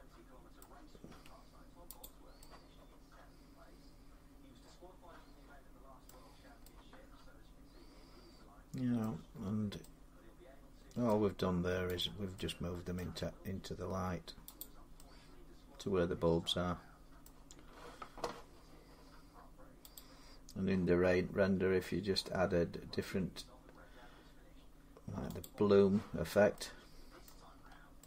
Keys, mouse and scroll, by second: 0.3 middle click, 0.9 g, 1.8 click, 5.8 middle click, 6.0 scroll up 3, 6.1 scroll down 5, 6.2 scroll, 8.8 middle click, 9.1 scroll, 9.2-9.7 scroll down 8, 10.8-11.3 middle click, 10.8 scroll, 11.8 click, 12.7 middle click, 12.8 g, 13.0 scroll, 14.4 click, 17.0 middle click, 17.3-17.6 scroll down 4, 19.7 click, 21.3-22.0 scroll down 2, 23.4-24.2 scroll up 4, 25.2 click, 26.0-26.3 scroll down 3, 27.0 middle click, 27.3 scroll up 2.